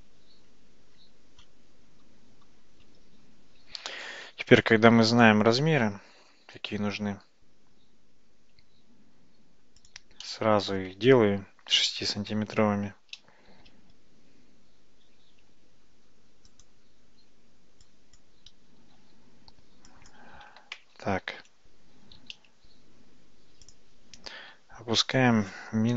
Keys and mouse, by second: 2.1 ctrl+z, 2.5 ctrl+z, 3.7 ctrl+z, 3.9 ctrl+z, 4.1 ctrl+z, 4.3 ctrl+z, 4.9 ctrl+z, 5.1 ctrl+z, 5.3 ctrl+z, 5.5 ctrl+z, 5.7 ctrl+z, 5.9 ctrl+z, 6.2 ctrl+z, 6.5 ctrl+z, 6.9 ctrl+z, 9.9 click, 10.3-10.9 middle drag, 13.5 g, 17.3 Tab, 18.3 click, 18.9 g, 21.5 ctrl+z, 22.3 g, 24.5 g.